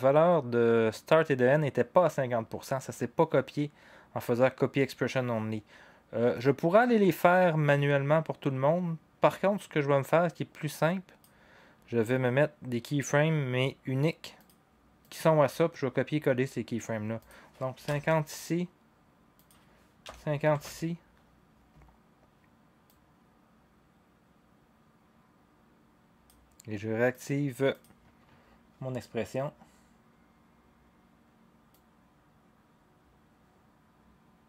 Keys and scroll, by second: 17.6-18.4 typing, 20.0 typing, 20.5 Return, 25.0-25.7 typing.